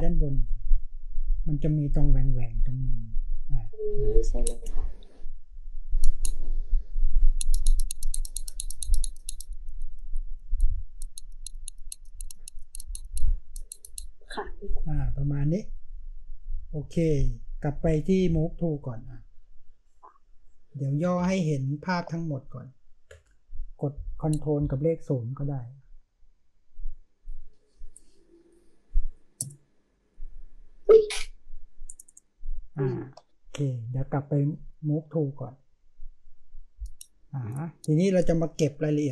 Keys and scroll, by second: 21.2 ctrl+space, 21.7 ctrl+space.